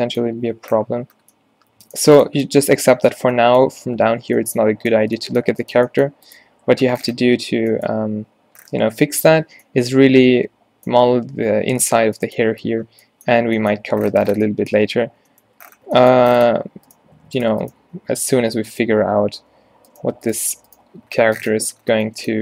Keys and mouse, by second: 6.4-7.4 drag, 7.4 Tab, 9.5 Tab, 13.5 a, 14.9 Tab, 15.3 Tab, 15.5 Tab, 18.0 r, 19.4 f, 21.6 middle click.